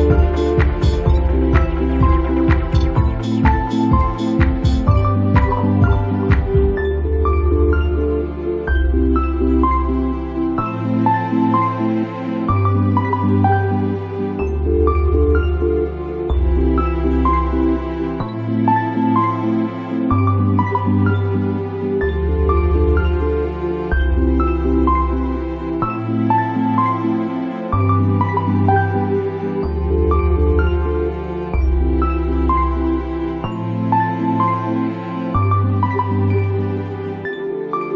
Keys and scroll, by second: 23.2 space, 28.2-29.2 typing.